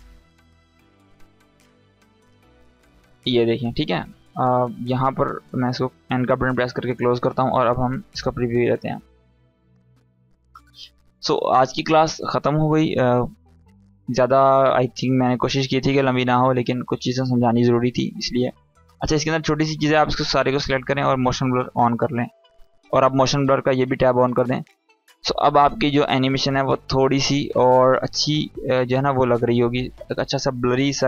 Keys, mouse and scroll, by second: 3.1 space, 3.9-5.7 drag, 6.2 n, 6.7-7.3 drag, 18.3 space, 19.4-20.0 drag, 25.6 space.